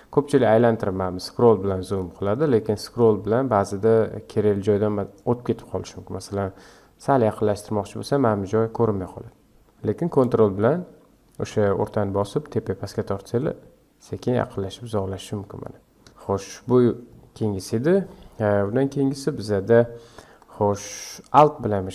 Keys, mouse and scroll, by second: 0.3-0.8 scroll up 5, 0.8-1.2 scroll down 5, 1.2-1.6 scroll up 5, 1.6-1.9 scroll down 5, 1.9-3.7 scroll up 11, 3.7-4.4 scroll up 1, 4.4-7.4 scroll down 1, 9.4 scroll up 1, 9.5 scroll down 1, 12.4-15.4 ctrl+middle drag, 16.0-18.9 scroll down 10, 21.1 scroll up 4.